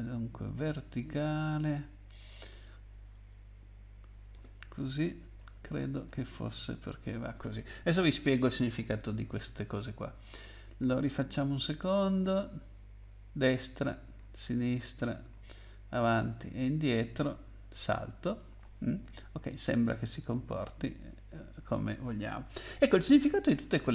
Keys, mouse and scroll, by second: 1.0 click, 4.3 BackSpace, 5.4 Down, 5.7 Right, 6.0 Right, 6.8 -, 8.2 ctrl+s, 10.2 click, 13.0 Right, 13.5 Right, 13.7 Right, 14.1 Left, 14.6 Left, 14.7 Left, 14.8 Left, 15.6 Up, 16.3 Down, 16.8 Down, 17.0 Down, 17.7 space.